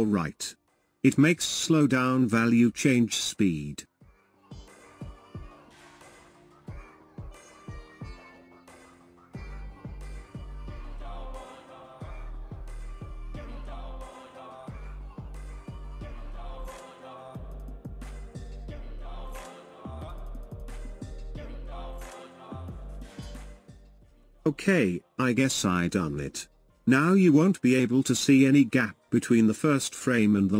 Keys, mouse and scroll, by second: 0.1 ctrl+z, 2.4-11.1 drag, 13.8-20.9 drag, 24.5-30.0 drag, 30.0 space.